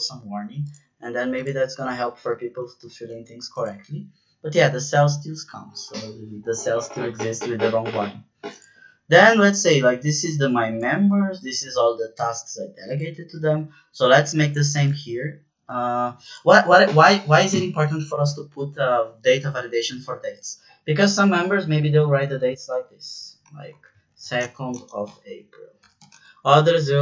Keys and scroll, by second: 2.8 ctrl+z, 22.6-27.0 typing.